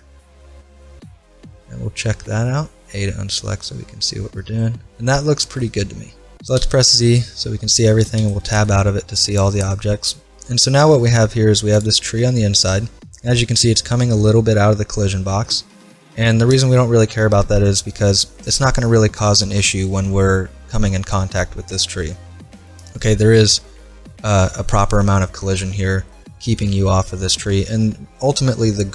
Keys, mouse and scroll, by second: 1.0 z, 1.5-3.0 middle drag, 2.6 a, 6.6 z, 7.4-8.7 middle drag, 8.2 Tab, 11.8-15.4 right drag, 23.4 middle click, 25.3-26.1 scroll down 1, 28.1-28.9 scroll up 1.